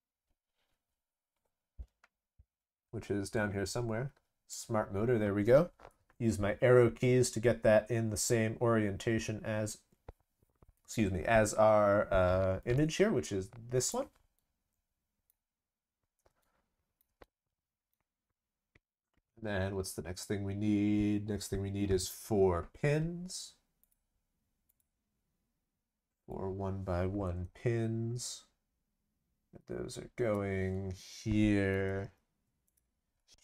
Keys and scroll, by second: 31.9 ctrl+c, 32.0 ctrl+v.